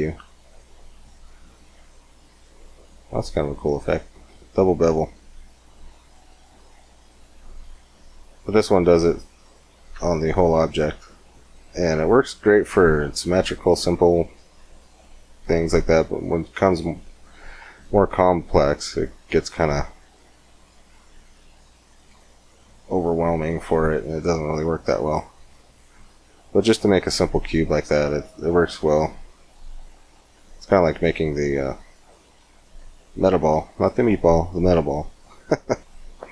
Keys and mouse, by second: 9.7 Tab, 15.2-16.9 drag, 16.9-18.3 middle drag, 18.3-21.6 drag, 21.7 click, 21.8 middle click, 24.1-25.7 middle drag, 26.5-28.2 middle drag, 28.3-29.9 middle drag, 29.9 shift+a, 35.9 middle click.